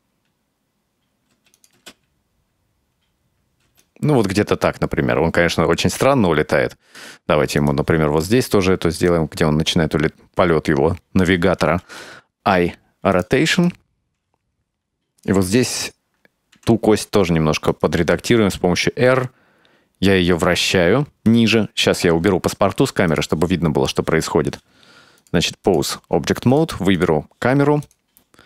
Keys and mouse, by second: 1.4 space, 1.6 click, 1.8 space, 3.8 space, 3.9-7.1 drag, 7.7 right click, 9.1-11.3 drag, 12.1 i, 13.7-15.3 drag, 16.6 r, 18.2 r, 23.2 click, 25.2-25.8 drag, 26.6 click, 27.0 click.